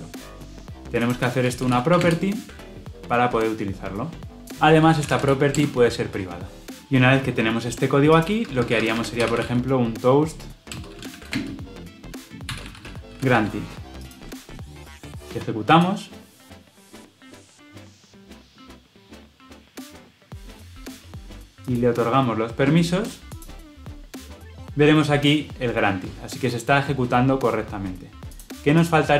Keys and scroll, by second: 5.5 Return, 8.3 Tab, 10.6 Return, 15.7 shift+F10.